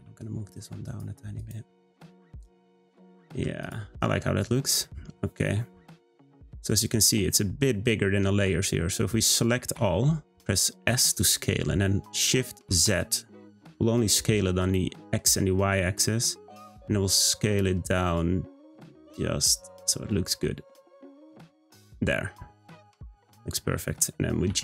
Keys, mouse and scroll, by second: 1.4 click, 1.7 scroll down 1, 2.0-3.5 middle drag, 3.5 scroll up 1, 3.6 click, 4.8-6.8 middle drag, 6.8 scroll up 2, 9.7 a, 10.9 s, 21.5 click, 21.9-23.2 middle drag, 23.2 Tab, 23.7-24.5 middle drag, 24.5 g.